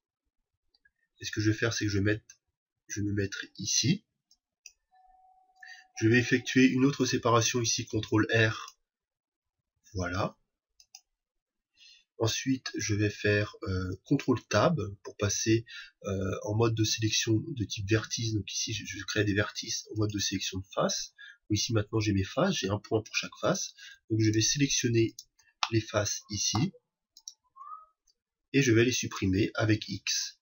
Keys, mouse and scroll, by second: 4.6-6.5 drag, 7.7 ctrl+r, 10.9-14.5 drag, 14.5 ctrl+Tab, 23.1-26.9 right drag, 25.6-27.4 shift+middle drag, 27.1 shift+right click, 29.6 x.